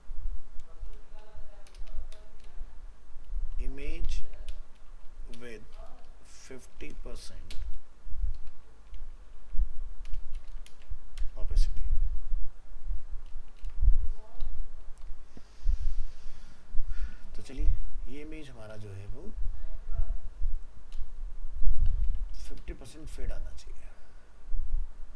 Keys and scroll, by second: 10.7 ctrl+space, 13.6 ctrl+s, 17.2 ctrl+s, 18.9 alt+f, 19.1 alt+移, 22.1 ctrl+c.